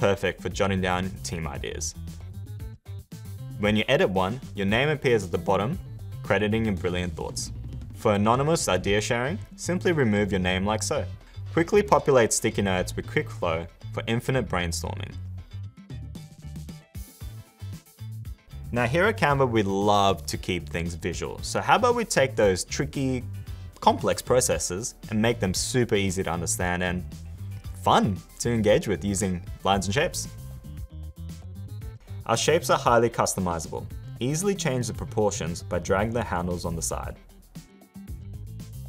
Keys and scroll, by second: 1.9 s, 6.4 super+-, 38.7 space.